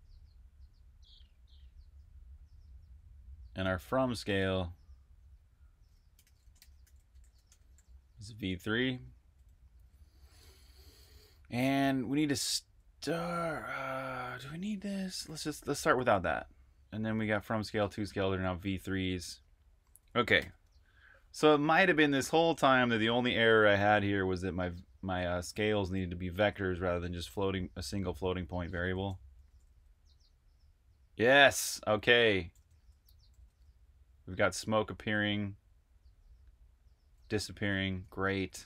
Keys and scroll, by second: 3.1-4.2 typing, 5.4-11.4 typing, 13.2-18.3 typing, 20.0-21.4 typing, 23.7-25.1 typing, 29.1-29.9 typing, 31.2-33.6 typing, 34.6-35.3 typing, 37.4 super+q.